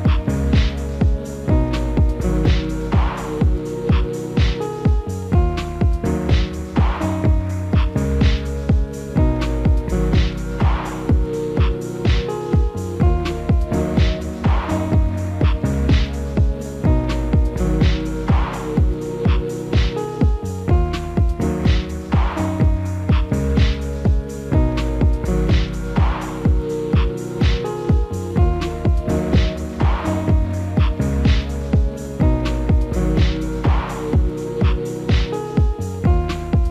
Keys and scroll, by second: 11.9 alt+w, 13.1 F4, 15.0 alt+w, 21.1 alt+w.